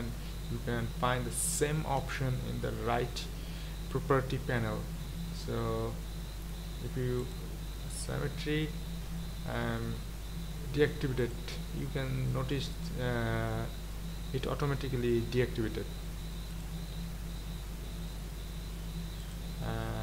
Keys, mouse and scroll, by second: 16.5 click.